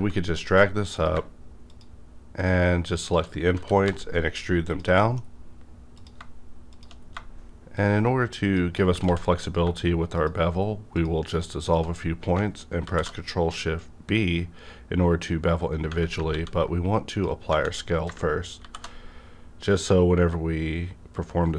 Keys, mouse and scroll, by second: 0.4 click, 0.9 click, 2.4 shift+click, 3.5 e, 3.8 z, 4.9 middle click, 5.2 scroll up 1, 5.9 click, 7.0 scroll down 1, 7.8 shift+click, 8.4 shift+click, 9.0 ctrl+x, 10.2 shift+click, 12.8 ctrl+shift+b, 14.3 scroll up 1, 15.6 right click, 16.3 ctrl+a, 16.4 Tab, 17.1 click, 17.5 Tab, 18.6 ctrl+shift+b, 19.3 scroll up 1.